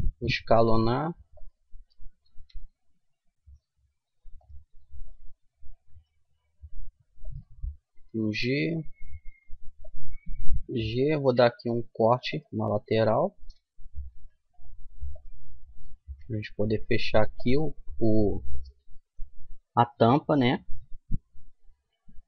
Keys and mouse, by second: 2.4 g, 5.0-6.0 drag, 5.9 g, 6.0 right click, 7.9-9.8 right drag, 8.1 g, 11.2 ctrl+r, 13.4-15.1 right drag, 14.2 g, 15.8-17.7 right drag, 16.1 g.